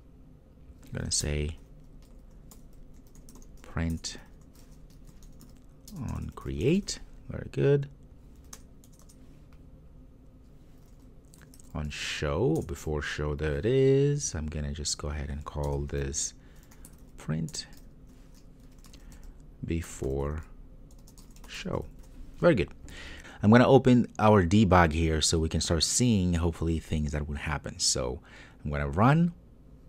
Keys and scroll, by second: 4.0 Return, 12.7 Return, 17.5 Return, 29.0 ctrl+r.